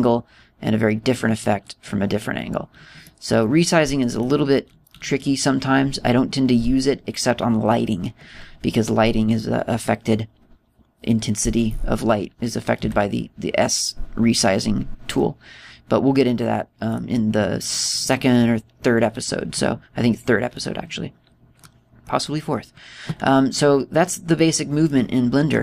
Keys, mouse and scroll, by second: 2.4-3.1 scroll down 1, 3.4-4.0 scroll up 3, 4.0 middle click, 5.6-6.7 scroll up 7, 6.7-7.8 scroll down 1, 13.8 s, 17.9 click, 20.0-20.4 scroll up 2, 20.4 scroll down 1, 20.4-21.5 scroll down 3, 21.5 scroll up 2, 21.7-22.6 scroll down 5, 22.6 middle click, 24.1 scroll up 3, 24.6-25.3 scroll down 2, 25.3 middle click, 25.3 scroll down 2.